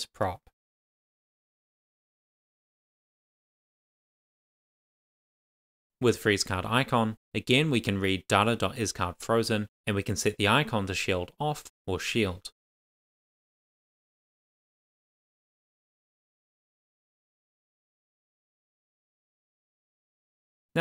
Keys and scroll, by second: 6.6 Return, 7.0 shift+s, 7.9 shift+;, 8.6 Tab, 8.9-11.3 typing, 13.5 super+s.